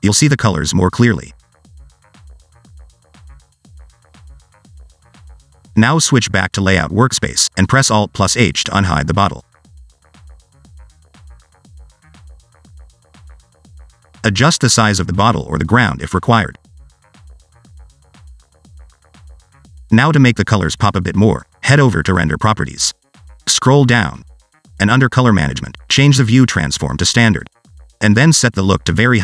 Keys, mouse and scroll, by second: 7.6 click, 9.9 click, 12.7 alt+h, 13.3 scroll down 1, 13.5 middle click, 13.9-14.5 scroll up 1, 14.5 scroll up 1, 14.6 alt+z, 15.0 click, 15.3 click, 15.5 click, 16.1 Tab, 16.7-17.2 scroll up 2, 17.2 1, 17.4 click, 17.9 s, 18.5 Tab, 18.7 s, 20.1 scroll down 1, 20.3 shift+middle click, 21.1 click, 21.4 alt+z, 21.6 scroll down 1, 21.8 shift+middle click, 23.0 click, 23.6-25.3 scroll down 5, 25.3 click, 25.6-27.4 scroll down 1, 27.4 click.